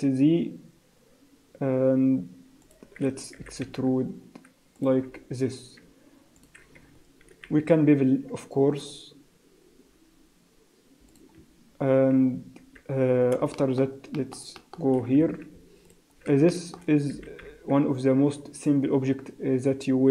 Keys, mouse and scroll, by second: 3.4 e, 5.1-5.4 scroll down 2, 5.4 scroll up 3, 6.4 alt+click, 7.3 ctrl+b, 11.4 Tab, 11.8-13.0 scroll down 3, 12.2 z, 13.1 scroll down 3, 13.6 shift+middle click, 14.1 shift+middle click, 14.6 shift+middle click, 14.9 shift+scroll up 3, 15.3 Tab, 15.9 alt+click, 16.5 shift+middle click, 17.1 e.